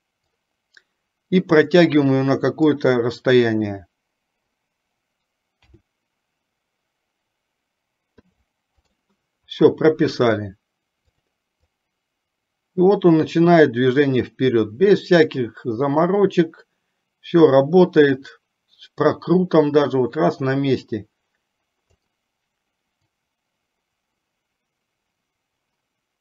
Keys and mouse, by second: 0.6-3.0 drag, 11.2 click, 12.0-22.2 drag, 23.2-26.2 drag.